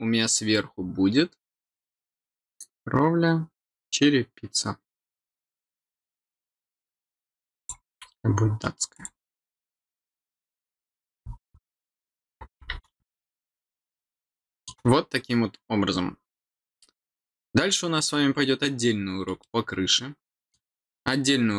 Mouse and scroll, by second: 7.5 click, 8.9 click, 12.0 click.